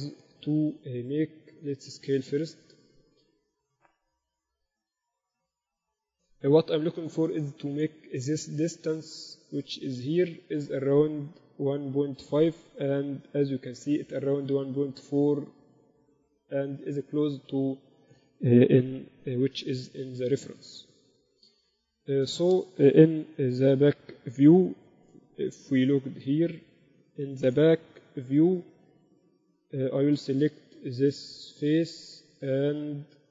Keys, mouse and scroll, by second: 6.9-9.3 middle drag, 9.3-11.8 right drag, 11.8-14.4 middle drag, 14.4-14.8 scroll up 1, 14.8-16.4 scroll down 1, 16.4-17.0 scroll down 1, 19.6 KP_8, 20.1 KP_6, 20.6 z, 23.7-24.6 KP_6, 25.3 KP_1, 26.9-28.7 typing, 31.2-33.3 right drag.